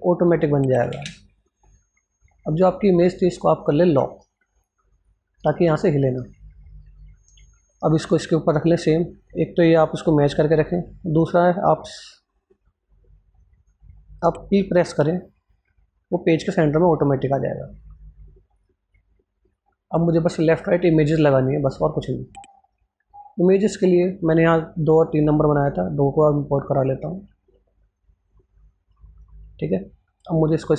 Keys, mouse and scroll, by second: 0.9 ctrl+space, 1.2 click, 3.1 right click, 5.9 Scroll_Lock, 6.1-13.6 drag, 15.1 p, 15.3 scroll up 1, 16.1 scroll down 1, 18.4 click, 21.2-21.6 scroll down 1, 21.6 click, 22.1-22.4 scroll up 1, 22.5 alt+Tab, 23.2-30.7 drag.